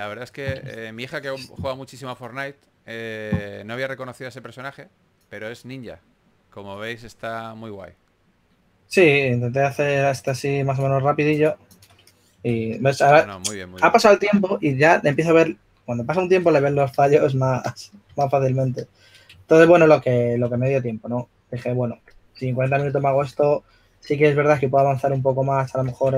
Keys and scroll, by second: 12.4 2, 17.0 2, 20.4-20.9 typing, 23.6 s, 25.9-26.1 typing.